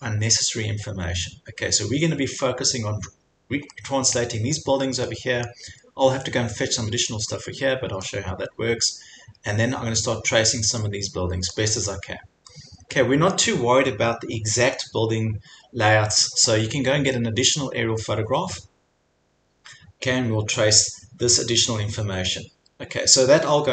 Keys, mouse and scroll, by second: 0.6 scroll, 4.2 middle click, 5.3-5.6 scroll, 8.1 middle click, 9.4-9.9 scroll, 11.6 scroll, 13.3 scroll, 15.9 scroll.